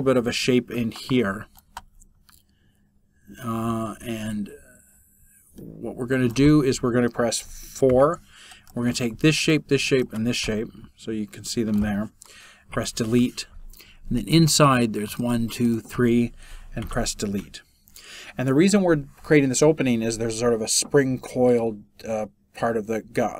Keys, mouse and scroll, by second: 12.5 Delete, 16.8 Delete.